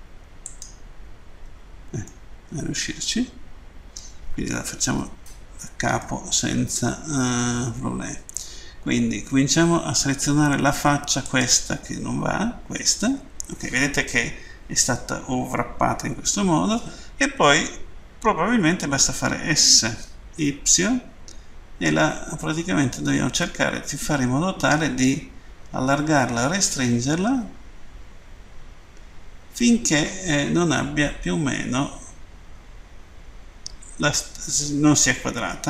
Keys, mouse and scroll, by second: 2.1 middle click, 6.0 middle click, 11.3 right click.